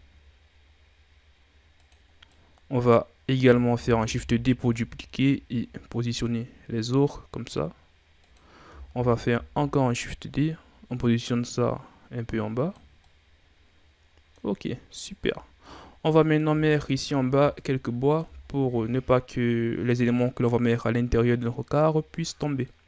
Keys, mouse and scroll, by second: 2.1 scroll down 1, 2.3-3.8 middle drag, 3.8 shift+d, 8.9 shift+d, 13.0-16.2 middle drag, 20.7-22.8 middle drag.